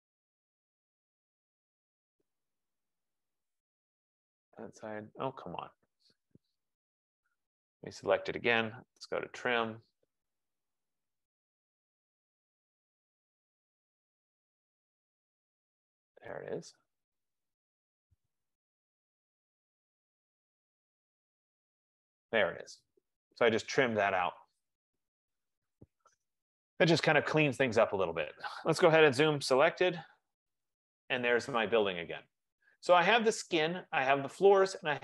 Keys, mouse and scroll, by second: 1.4 click, 4.0 click, 6.9 Escape, 6.9 Escape, 7.1 Escape, 7.7 click, 8.7 F15, 8.9-9.8 typing, 11.3-12.1 scroll, 13.8 click, 15.4 click, 17.7-18.2 scroll, 20.2 click, 21.7 click, 24.1 click, 24.6 click, 26.5 click, 29.1-30.2 typing, 31.4 click.